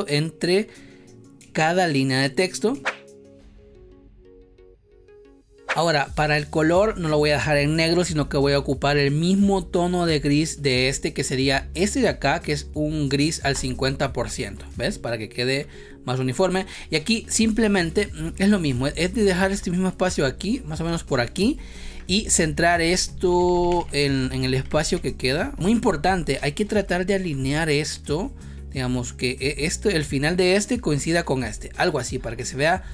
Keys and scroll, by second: 16.6 space, 23.2 Left, 24.2 Up, 24.8 Left, 25.5 space, 26.3 space.